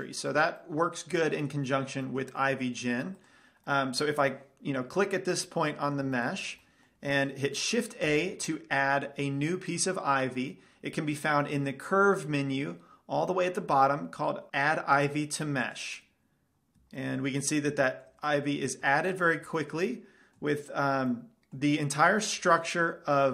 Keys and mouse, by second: 8.3 shift+a, 17.4 middle click, 19.4-23.3 middle drag.